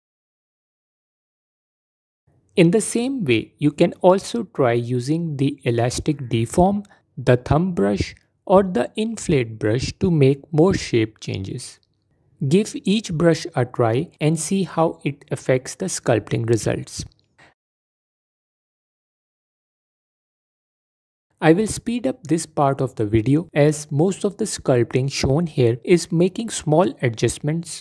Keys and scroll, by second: 0.3 f, 9.8 f, 11.4 f, 12.1 f, 13.7 f, 20.4 f, 25.6 f.